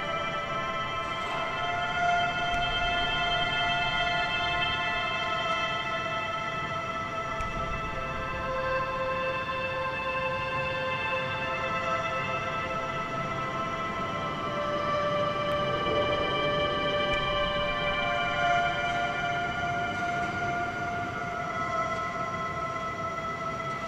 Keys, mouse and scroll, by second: 1.9 middle click, 1.9-2.6 scroll down 6, 2.8 a, 2.9 a, 3.2 Tab, 3.4 scroll down 1, 3.6 a, 3.8 a, 4.2-5.2 shift+middle drag, 5.2-5.6 scroll down 1, 5.6 shift+middle click, 6.3 click, 7.5-8.5 scroll up 1, 8.5 Tab, 9.7 3, 10.0 click, 10.8 g, 11.9 a, 12.1 a, 13.0 click, 13.7 a, 13.9 a, 14.3 Tab, 15.2 ctrl+3, 16.4 Tab, 16.8 a, 17.0 a, 17.5 ctrl+r, 20.0 a, 20.2 a, 20.6 Tab.